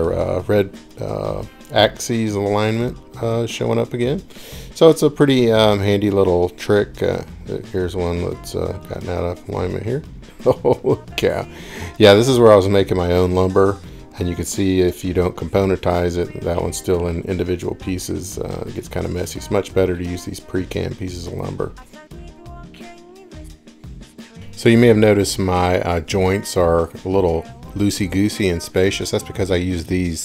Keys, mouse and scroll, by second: 1.0-1.7 scroll, 2.5-3.9 scroll, 4.4-5.5 scroll, 7.0 middle click, 9.3 middle click, 9.5 middle click, 9.7 middle click, 10.1 middle click, 10.3 middle click, 10.9 scroll, 13.6 ctrl+z, 14.0 ctrl+z, 14.7 ctrl+z, 16.5 middle click, 17.4 middle click, 17.5 middle click, 17.7 middle click, 18.6 middle click, 22.7 middle click, 23.1 middle click, 23.2 middle click, 23.4 middle click, 23.5 scroll.